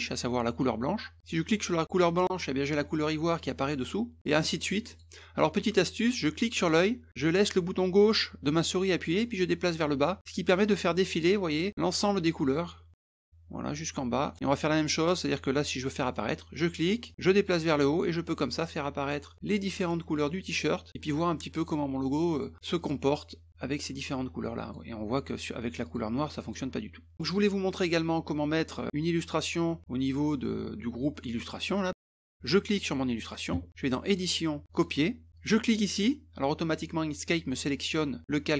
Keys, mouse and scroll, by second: 1.2 click, 4.2 click, 4.9 click, 6.7-12.2 drag, 13.0-14.3 drag, 17.1-19.9 drag, 20.9 click, 22.3 click, 22.8 click, 24.6 click, 25.1 click, 25.8 click, 26.4 click, 32.3-33.3 drag, 34.1 click, 34.7 click, 35.3 click.